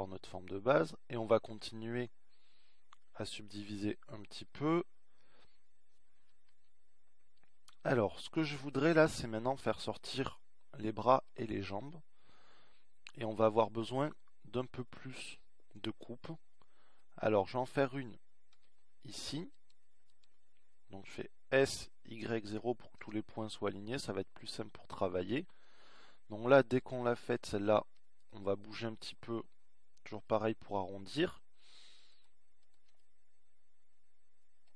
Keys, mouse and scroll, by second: 2.8 z, 11.2-13.1 middle drag, 17.6 middle click, 23.7 ctrl+r, 26.7 s, 34.4-34.7 middle drag.